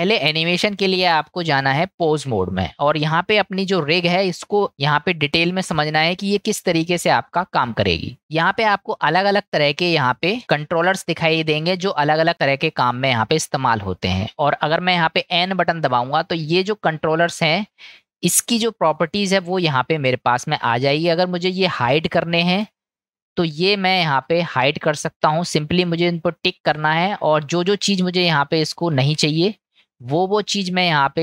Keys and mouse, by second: 1.1-2.4 drag, 4.2-6.4 middle drag, 10.9 click, 11.8-14.1 middle drag, 15.5 n, 17.3-18.0 middle drag, 20.4-21.0 middle drag, 22.2-22.6 shift+middle drag, 23.2 middle click, 26.0 click, 26.5 click, 26.9 click, 27.5 drag, 27.9 click, 29.4 drag, 30.1 click, 30.7 click, 31.1 click.